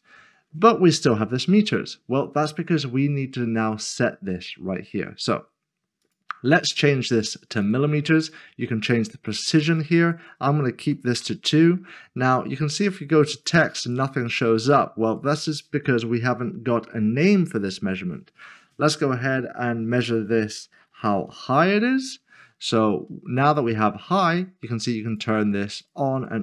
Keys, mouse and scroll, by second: 0.8-1.9 scroll up 1, 1.9-3.9 scroll down 1, 6.0-9.5 scroll down 1, 9.5 click, 10.8 2, 11.2 Return, 12.8 click, 13.8 double click, 15.1 click, 20.6 click, 20.9-21.3 typing, 23.5 click, 25.4 click.